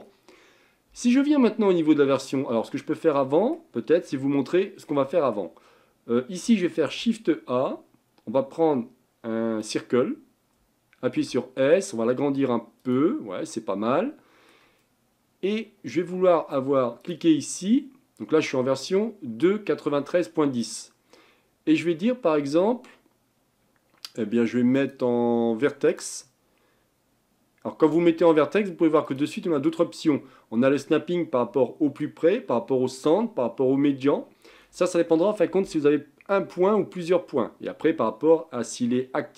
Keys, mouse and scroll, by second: 2.8-4.0 middle drag, 4.0-4.9 scroll up 6, 4.9-5.6 middle drag, 5.6-6.8 scroll down 3, 6.8 shift+a, 11.2 s, 13.5-17.0 middle drag, 17.0 click, 20.6-27.8 drag, 29.1-32.2 drag.